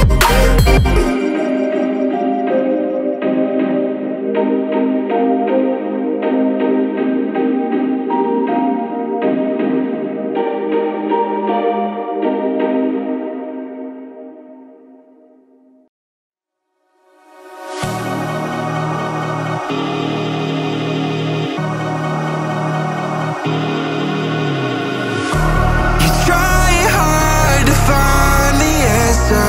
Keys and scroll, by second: 6.8 BackSpace, 26.1 space.